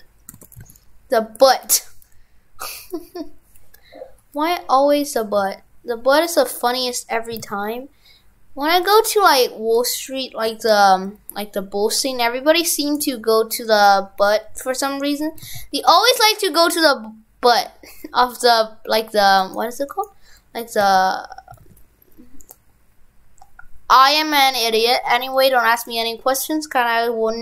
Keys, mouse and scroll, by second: 0.4 shift+f, 20.1 right click.